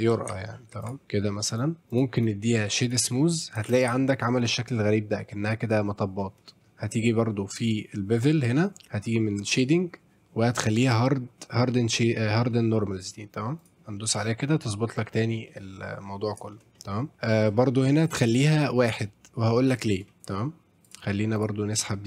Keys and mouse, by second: 0.3 alt+w, 0.8 alt+click, 1.5 right click, 1.9 click, 2.2-2.9 right drag, 3.7 shift+f, 3.9 s, 13.6 click, 15.5-16.3 middle drag, 16.5 shift+middle drag, 16.8-17.2 middle drag, 18.0 click, 18.3 click, 20.9 click, 21.4 click.